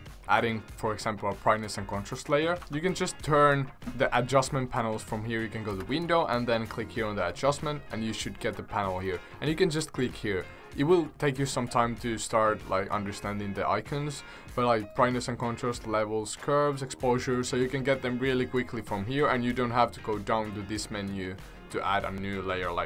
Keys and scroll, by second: 2.6 ctrl+z.